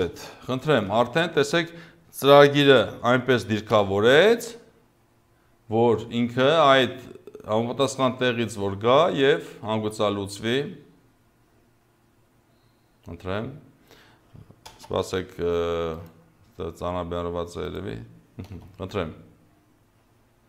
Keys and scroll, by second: 0.0 Return, 3.7 0, 14.7 space, 18.5 0.